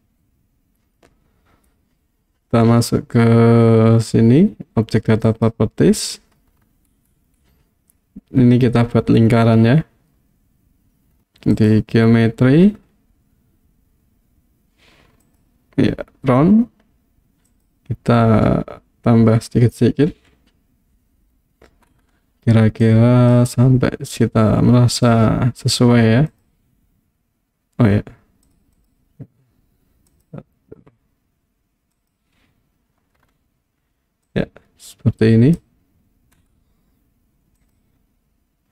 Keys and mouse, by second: 0.0-1.0 middle drag, 5.3 click, 11.5 click, 15.3 click, 17.5 click, 20.1 KP_1, 22.8 click, 24.9 click, 26.4 click, 28.6 click, 28.8 click, 30.1 click, 31.9 click, 34.3-35.6 drag, 37.6 click.